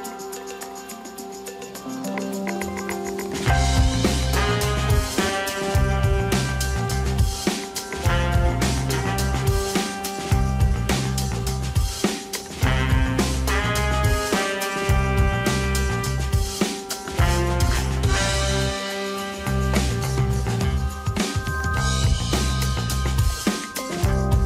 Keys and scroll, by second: 1.5 @, 9.5 Tab, 23.6 a, 24.0 m.